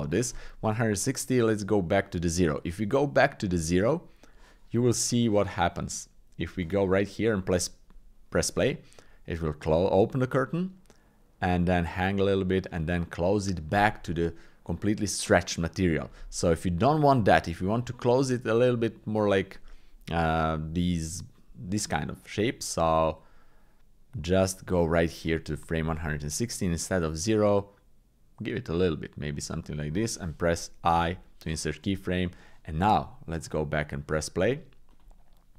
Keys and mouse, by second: 1.6-2.7 drag, 3.4-4.4 drag, 5.3-6.5 drag, 7.4 click, 16.9-22.9 drag, 23.2 click, 26.8-29.4 drag, 31.0 i, 32.3-33.5 drag, 35.0 click.